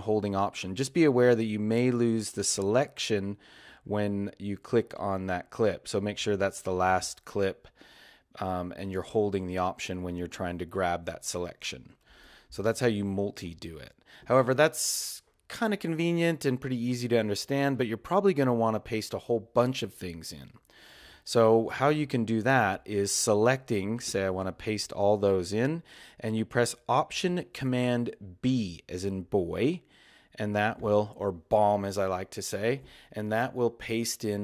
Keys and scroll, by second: 30.8 alt+super+b.